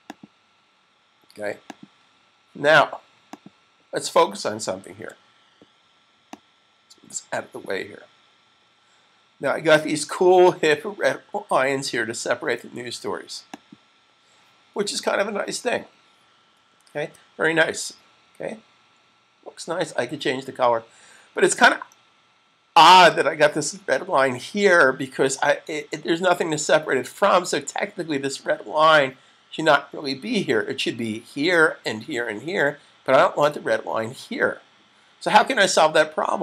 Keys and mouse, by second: 4.7 super+s, 6.0 click, 13.5 click, 16.8 super+s.